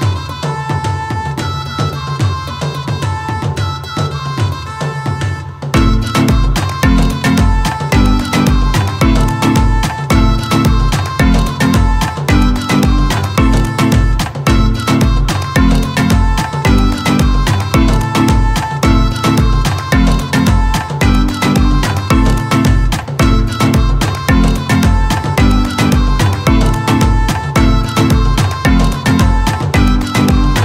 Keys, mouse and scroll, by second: 2.4 o, 6.6 click, 9.0 o, 11.6 click, 14.1-17.7 shift+drag, 18.5 ctrl+space, 20.7 ctrl+space, 25.5-30.6 shift+drag.